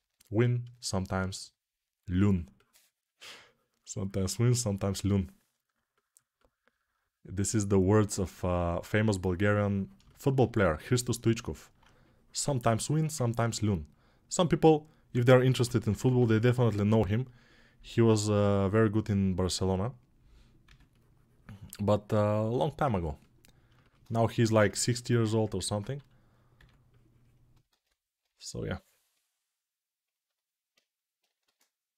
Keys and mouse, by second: 13.0-31.9 ctrl+alt+drag.